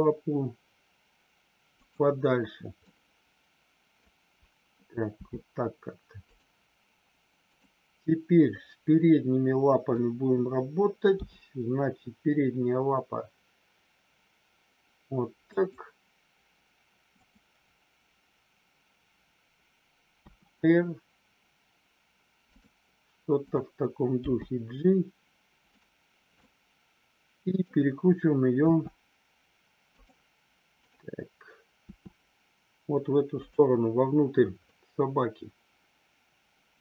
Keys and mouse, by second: 2.8-4.0 middle drag, 5.1 g, 7.3 click, 8.6-10.0 middle drag, 15.4 click, 17.1 click, 20.3 r, 24.2 g, 26.3-27.6 middle drag, 28.6 r, 29.8 click, 30.7 click, 31.8 r, 33.3 click, 34.7-36.7 middle drag.